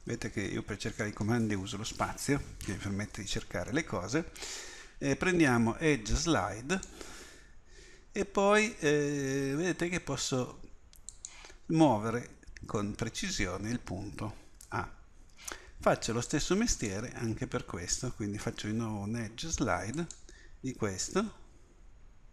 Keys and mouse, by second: 14.5 a, 15.3 b, 18.5 space.